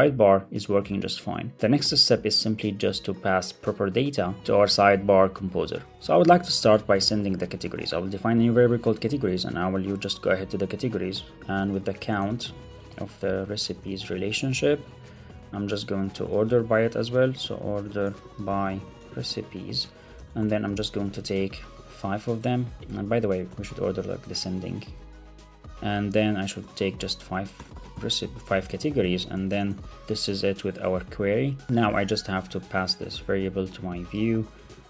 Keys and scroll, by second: 6.0 shift+super+Right, 9.9 Return, 13.1 Left, 15.1 super+Right, 15.9 Return, 19.6 super+Right, 20.1 Return, 20.7 Return, 22.6 Up, 22.9 super+Right, 23.0 Left, 24.6 alt+Left, 25.2 Right, 25.4 Left, 25.6 Right, 25.7 Down, 26.4 Return, 29.6 alt+super+l, 29.7 super+s, 32.3 alt+Right, 32.5 alt+shift+Left, 32.8 shift+Right, 33.0 super+c, 33.8 super+v, 34.8 super+v.